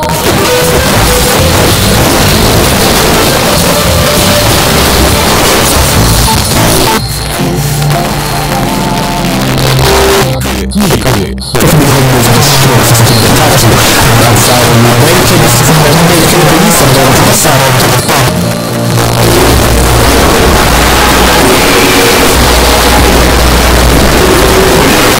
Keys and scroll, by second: 6.3 Page_Down, 17.5 Page_Down, 25.1 space.